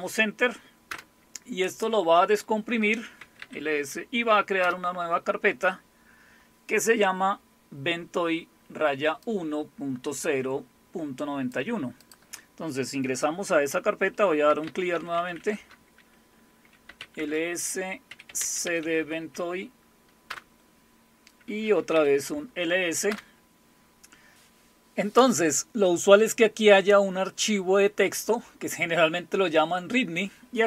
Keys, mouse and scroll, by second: 0.9 Return, 2.9-3.9 typing, 4.6 Return, 9.2-11.6 drag, 12.0 click, 14.2-20.3 typing, 21.5-23.6 typing.